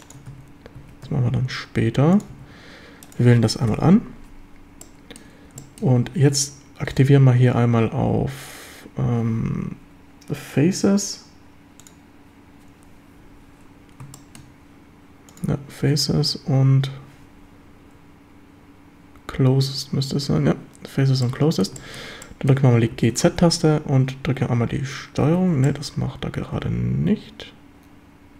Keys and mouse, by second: 0.0 ctrl+click, 0.3 a, 0.8 a, 1.0 q, 2.3 a, 3.7 ctrl+l, 4.8-5.2 drag, 5.6 shift+drag, 6.9-13.4 drag, 14.1 shift+middle drag, 15.3-20.4 drag, 21.2 middle click, 21.8 shift+middle click, 22.2 click, 22.9 g, 23.1 z, 25.4 Escape, 25.6-26.7 drag, 26.7 middle click, 27.0-28.3 drag.